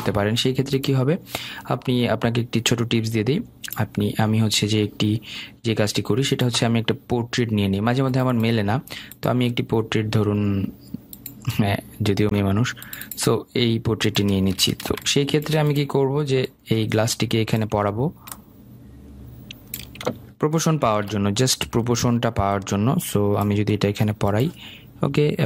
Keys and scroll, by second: 21.3 ctrl+shift+].